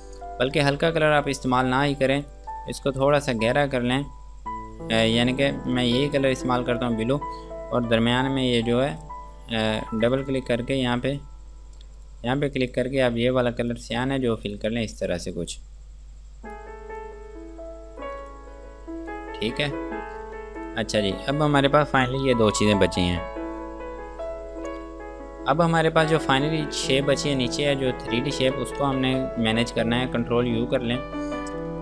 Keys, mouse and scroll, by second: 2.5 click, 5.9 click, 20.4 ctrl+space, 20.8 click, 27.6 click, 29.1 ctrl+z, 30.9 ctrl+u, 31.7 click.